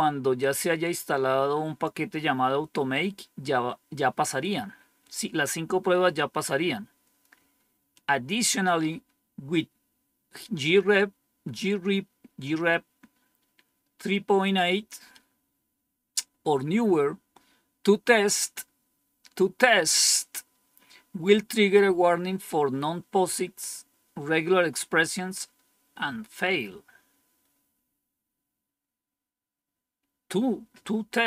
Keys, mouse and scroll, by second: 0.3-1.8 drag.